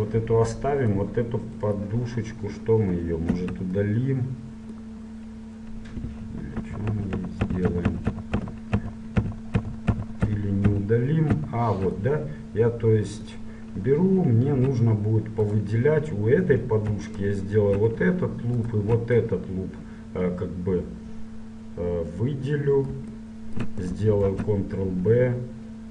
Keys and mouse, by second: 1.0-5.5 middle drag, 3.5 Tab, 6.3 ctrl+z, 6.7 ctrl+z, 7.1 ctrl+z, 7.4 ctrl+z, 7.6 ctrl+z, 7.8 ctrl+z, 8.0 ctrl+z, 8.5 ctrl+z, 8.8 ctrl+z, 9.3 ctrl+z, 9.7 ctrl+z, 10.0 ctrl+z, 10.3 ctrl+z, 10.7 ctrl+z, 11.4 ctrl+z, 12.2-14.3 middle drag, 16.6-19.6 super+right drag, 19.6 middle click, 20.0 right click, 20.4 middle click, 21.0 right click, 21.7-23.3 middle drag, 24.5 ctrl+b, 25.2 middle click.